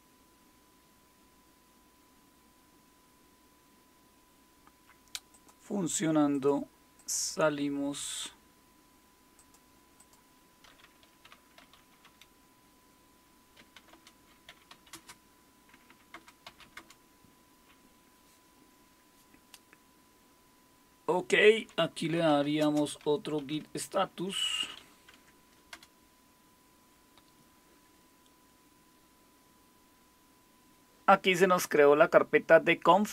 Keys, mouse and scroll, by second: 5.3 click, 6.3-7.6 drag, 9.4-10.6 drag, 11.4-17.1 typing, 21.9-25.7 typing.